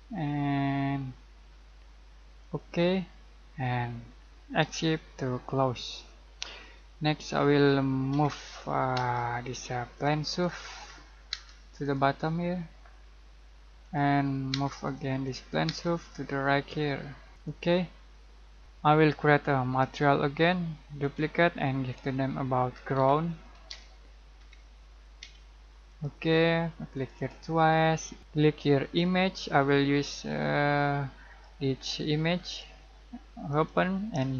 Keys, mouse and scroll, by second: 2.4 click, 4.7 Escape, 5.5-6.0 scroll down 1, 6.0 middle click, 7.2-8.1 scroll up 1, 8.1 m, 9.0 space, 10.0 click, 10.9-11.4 scroll up 1, 11.4 space, 11.9 click, 13.9 click, 14.6 space, 14.9 click, 15.7 space, 16.0 click, 17.4 click, 18.6 z, 19.8 right click, 21.1 click, 22.7-24.4 typing, 25.9-34.3 drag.